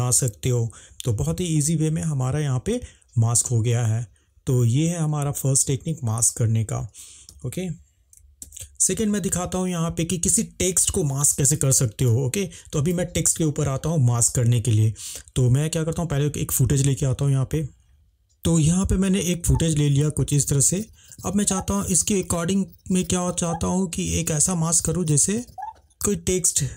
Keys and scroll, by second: 7.3 space, 8.4 ctrl+s.